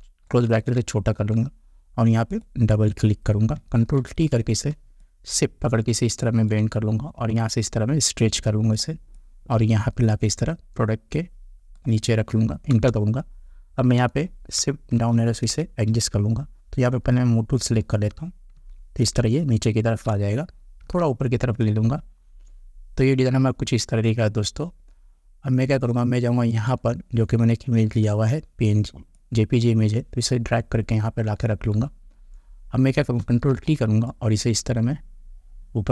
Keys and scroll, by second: 4.0 ctrl+t, 12.7 Return, 15.0 shift+Down, 18.5 shift+Down, 20.8 Up, 33.5 ctrl+t.